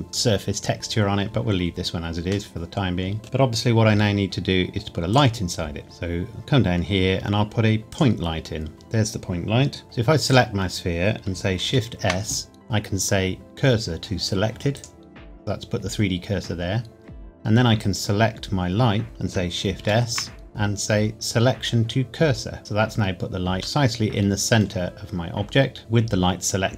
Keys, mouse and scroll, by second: 1.7-2.5 scroll down 1, 2.5 middle click, 5.1 click, 5.8 shift+a, 7.9 click, 8.7 scroll down 1, 9.8-10.3 scroll up 1, 10.3 click, 11.6 shift+s, 14.7 click, 17.7 click, 19.8 shift+s, 22.6 click, 23.5-23.8 scroll up 1, 23.8 middle click.